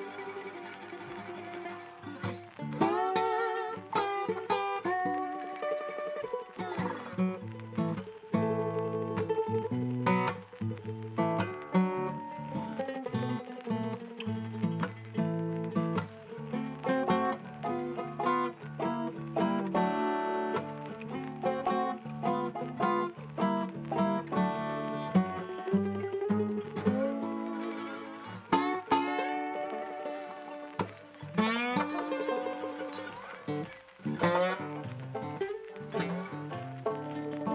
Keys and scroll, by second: 5.3-6.2 typing, 7.9-9.0 typing, 15.4 f, 15.8 z, 16.7 F4, 17.9-18.8 typing, 20.0 1, 20.2 Return, 28.4 BackSpace, 28.6 6, 28.6 Return, 29.8 c, 29.9 alt+w, 30.2 c, 30.4 alt+w.